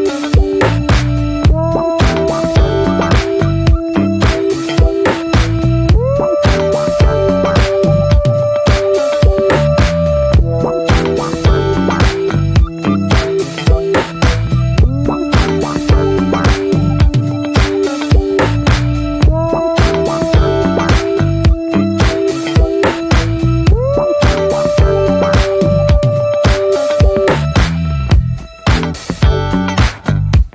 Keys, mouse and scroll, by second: 0.5 shift+middle click, 1.3-4.4 middle drag, 4.4-5.9 drag, 5.9 ctrl+z, 11.3 click, 11.7-12.7 shift+middle drag, 12.7 ctrl+z, 14.1-19.3 drag, 19.3 scroll down 3, 19.5-20.6 middle drag, 20.6-21.0 scroll up 1, 21.0-23.4 middle drag, 23.4-27.1 drag, 27.1-28.3 middle drag, 28.3 ctrl+z, 29.7 click, 29.9 middle click, 30.2-30.5 scroll up 1.